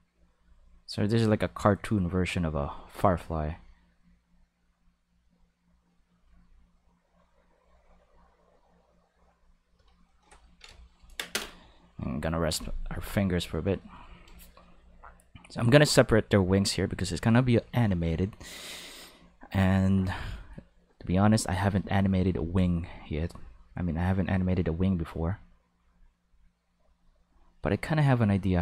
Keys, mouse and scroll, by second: 0.9 click, 2.4 click, 3.6-4.7 drag, 5.3 click, 6.5-9.2 drag, 23.4-24.4 drag, 25.2-26.5 drag, 26.9-28.1 drag.